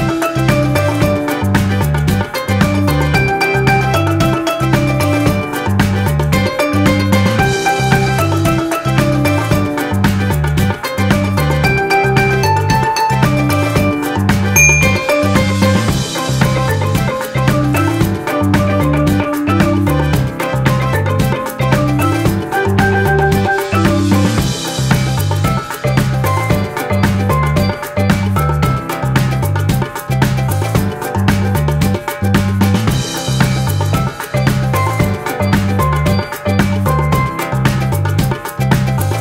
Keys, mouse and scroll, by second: 10.5 click, 11.1 click, 31.7 z, 35.9 ctrl+-.